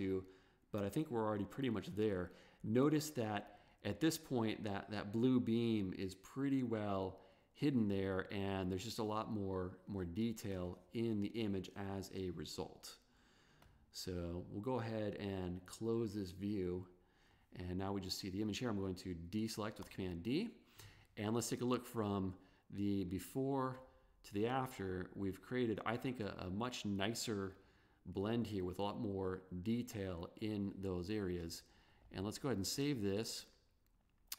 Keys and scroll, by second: 3.7 v, 10.1 b, 19.9 super+d.